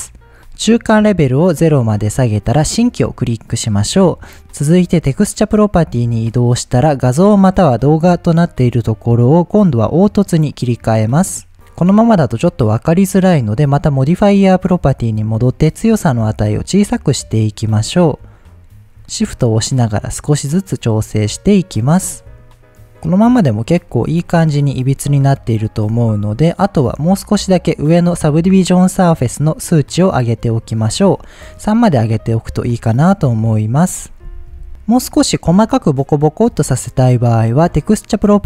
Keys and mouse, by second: 0.0-2.0 drag, 2.6 click, 5.0 click, 8.3-10.5 drag, 13.8 click, 15.7-17.5 drag, 17.9-21.6 shift+drag, 22.1-22.6 middle drag, 23.0-23.4 middle drag, 23.8 middle drag, 24.8-25.4 middle drag, 25.8-26.2 middle drag, 30.5 click, 31.7-32.1 middle drag, 32.7-33.0 middle drag, 33.8-34.1 middle drag, 38.0 click.